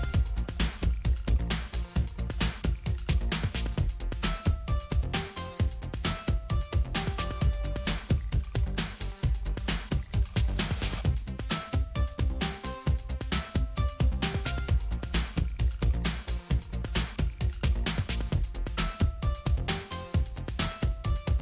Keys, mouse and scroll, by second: 2.3-6.3 middle drag, 6.3-10.5 drag, 10.6-12.0 drag, 12.1 click, 13.9 click, 14.4 right click, 16.3 click, 17.7 right click, 19.5 click, 21.1 click.